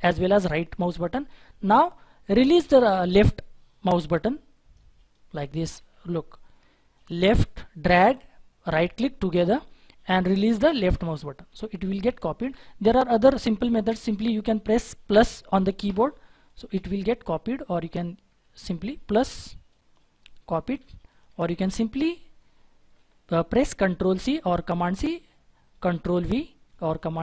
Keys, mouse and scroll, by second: 5.6 right click, 5.7 ctrl+z, 8.6 right click, 12.0 right click, 12.4 ctrl+z, 15.8-20.8 drag, 21.3-25.4 drag, 24.9 middle click, 26.1 ctrl+v.